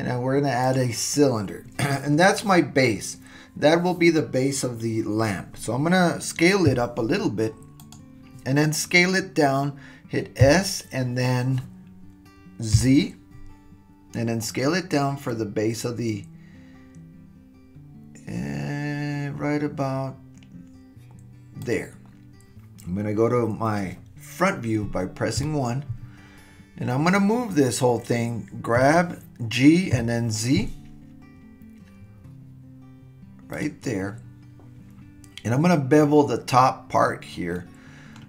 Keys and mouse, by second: 6.6 s, 10.4 s, 25.4 KP_1, 28.8 g, 37.5-38.2 middle drag.